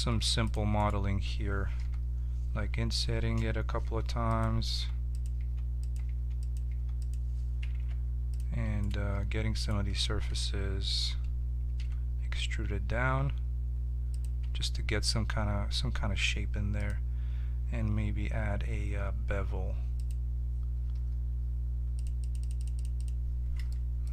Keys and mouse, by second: 0.0 ctrl+Tab, 0.7-2.8 drag, 1.7 i, 3.8-6.6 typing, 7.7 ctrl+Tab, 8.8-11.3 drag, 11.3 right click, 11.7 e, 14.4 Tab, 16.7-20.0 drag, 21.9-24.1 drag, 23.7 middle click.